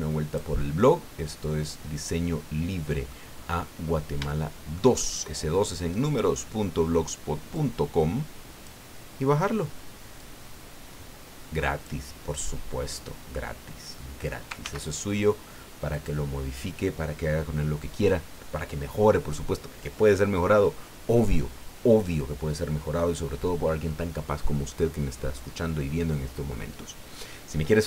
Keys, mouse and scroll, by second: 0.8-3.3 middle drag, 4.3-4.9 shift+middle drag, 5.0 shift+middle click, 5.3-6.3 drag, 7.5-8.8 drag, 10.2-12.0 drag, 12.3-13.0 scroll down 2, 13.0-14.4 middle drag, 14.6 ctrl+s, 15.9 click.